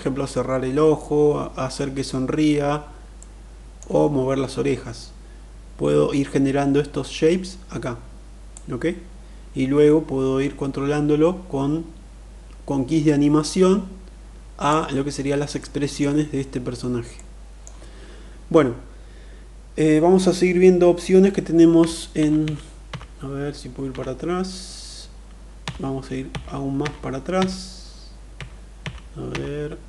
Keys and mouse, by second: 2.8-3.5 middle drag, 8.1-14.4 drag, 15.3-15.7 middle drag, 16.8 middle click, 21.3 ctrl+z, 21.8 ctrl+z, 22.1 ctrl+z, 22.5 ctrl+z, 23.6 ctrl+z, 25.3 ctrl+z, 25.8 ctrl+z, 26.4 ctrl+z, 27.1 ctrl+z, 28.1 ctrl+z, 28.5 ctrl+z, 29.0 ctrl+z, 29.7 ctrl+z.